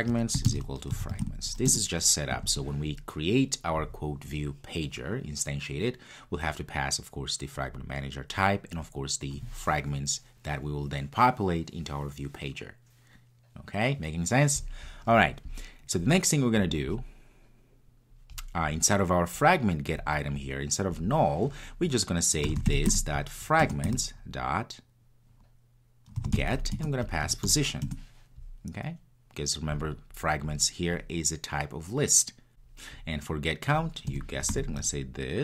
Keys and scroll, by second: 23.6 Return.